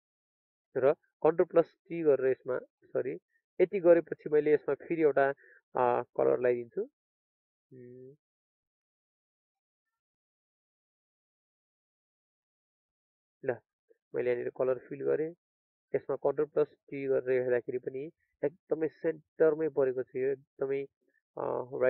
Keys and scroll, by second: 2.0 ctrl+t, 12.6 alt+Delete, 13.7 ctrl+d.